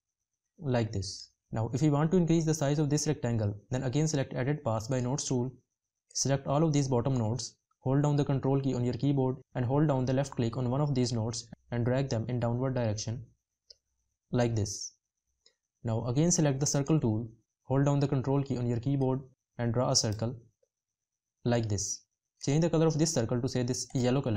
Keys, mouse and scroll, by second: 8.0 ctrl+click, 17.2 ctrl+click.